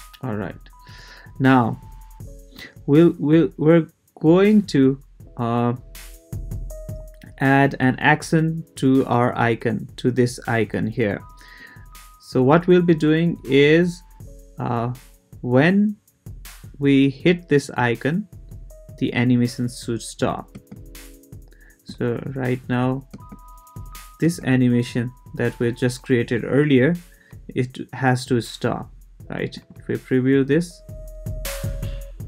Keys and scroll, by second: 20.5 space, 23.1 space.